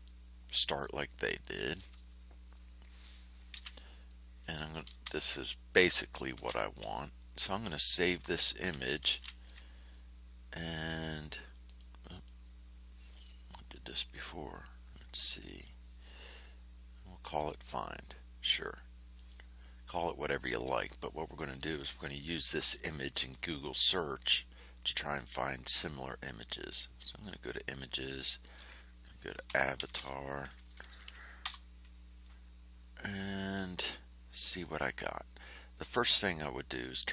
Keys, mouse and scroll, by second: 0.0-1.9 drag, 2.0-2.7 ctrl+scroll down 4, 3.5 ctrl+shift+c, 4.0 ctrl+shift+middle click, 6.3 ctrl+shift+a, 6.9 ctrl+shift+middle click, 9.1 ctrl+shift+e, 11.6 click, 12.1 click, 17.3 click, 19.1 click, 20.8 click, 25.1 click, 27.1 click, 28.4 click, 29.2-30.4 typing, 30.8 Down, 31.4 Return, 35.7 scroll up 2, 36.8 click.